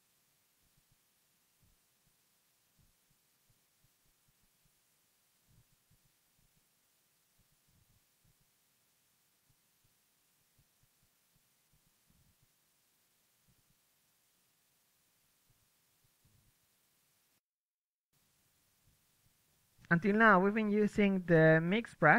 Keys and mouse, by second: 2.9 ctrl+z, 3.4 ctrl+z, 6.1 KP_1, 7.3 ,, 7.5 m, 8.8 drag, 8.9-10.2 drag, 9.2-11.1 middle drag, 10.2 alt+z, 10.5 alt+z, 11.1 m, 11.3-15.9 drag, 11.6 m, 14.9-15.7 right drag, 15.7 KP_1, 15.9 m, 16.0-16.5 middle drag, 16.4 KP_3, 17.2 click, 17.4 Tab, 17.7 right click, 18.0-21.8 typing, 18.3 click, 18.9 right click, 19.0 Tab, 19.2 right click, 21.7 Tab.